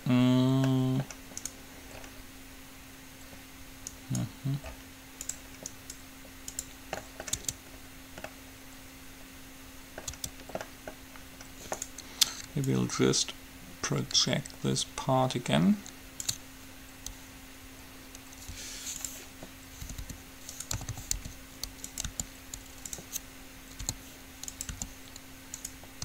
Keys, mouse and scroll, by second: 1.7-3.2 right drag, 3.2 middle click, 4.2-7.7 right drag, 7.2 click, 7.7 Tab, 10.3 Tab, 12.0 right click, 13.7-14.7 drag, 18.7 u, 20.2-22.2 typing, 24.2 s, 24.9 g.